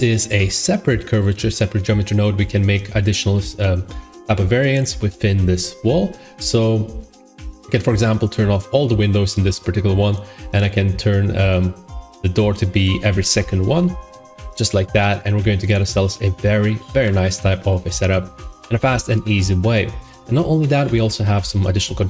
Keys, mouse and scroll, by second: 1.4 middle click, 6.4 middle click, 6.5 middle click, 6.6 middle click, 8.8 click, 9.2 click, 12.5 click, 12.9 click, 13.6 typing, 13.8 Return, 15.0 middle click, 15.3 Tab, 15.7 click, 16.5 middle click, 16.9 shift+middle click, 17.6 middle click, 17.8 middle click, 17.9 middle click, 18.5 middle click, 19.3 middle click, 19.4 middle click, 20.2 middle click, 20.8 middle click, 20.9 middle click, 21.9 middle click, 22.0 middle click.